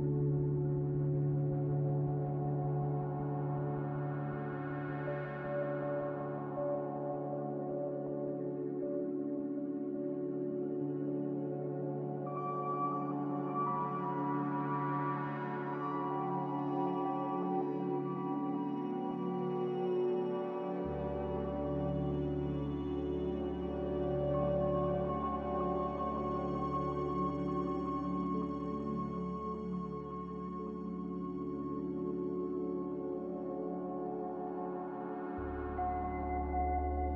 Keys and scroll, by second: 1.7-4.7 typing, 11.5 a, 18.5 3, 18.7 Return, 22.7 Return, 22.7 2, 25.8 typing, 27.4 typing, 27.6 Return, 30.9 m, 33.5 a.